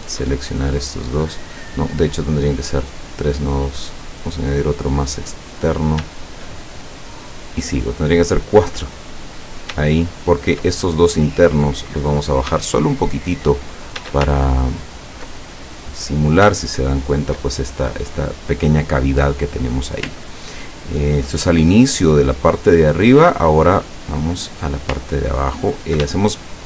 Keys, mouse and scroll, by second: 0.0 shift+click, 0.7 shift+click, 4.7 click, 5.6 click, 8.4 click, 9.4 click, 10.1 shift+click, 11.1-12.4 shift+drag, 12.7 shift+middle click, 14.6-15.3 ctrl+shift+scroll down 5, 15.5 ctrl+middle click, 16.7-17.3 ctrl+scroll up 4, 20.5 ctrl+scroll down 2, 25.2-25.6 ctrl+scroll up 1, 26.2 ctrl+shift+click, 26.2 ctrl+shift+middle click, 26.5 shift+click.